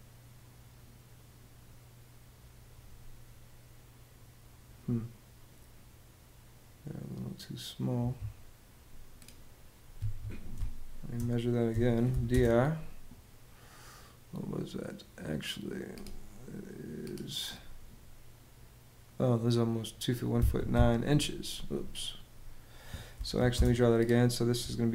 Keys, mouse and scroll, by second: 7.7 Escape, 9.6 Escape, 10.2 space, 11.4 d, 11.8 i, 12.0 space, 20.0 Escape, 21.3 Escape, 22.6-23.5 typing, 24.8 l.